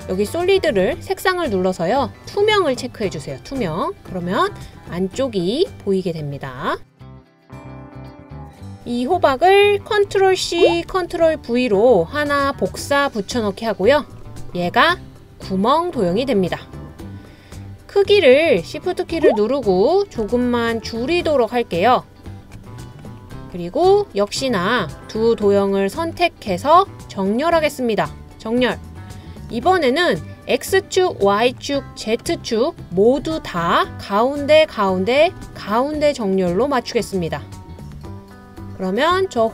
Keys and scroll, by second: 10.5 super+c, 10.9 super+v.